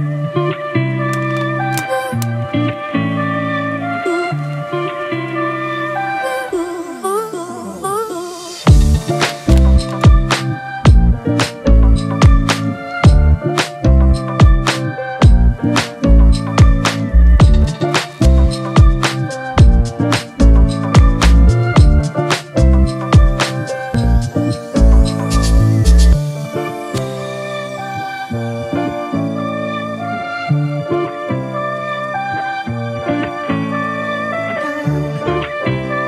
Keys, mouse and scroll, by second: 0.0-0.3 typing, 1.4-2.2 typing, 3.5-4.3 typing, 5.2 double click, 8.6 ], 11.2 double click, 14.7 ctrl+-, 14.9 ctrl+-, 15.1 ctrl+-, 15.3 ctrl+-, 15.6 ctrl+-, 25.7 alt+click.